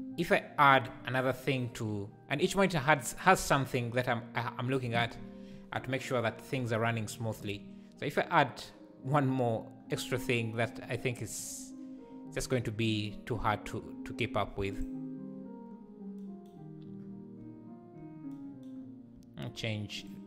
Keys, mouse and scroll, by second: 1.7 /, 11.4 click, 14.9-20.1 drag.